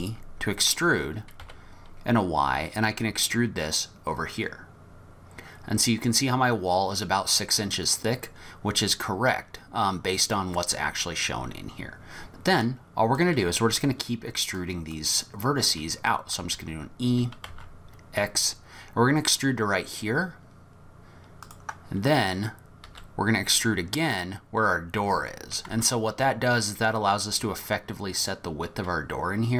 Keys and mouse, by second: 12.6 click, 14.6 click, 16.4 e, 22.9 e.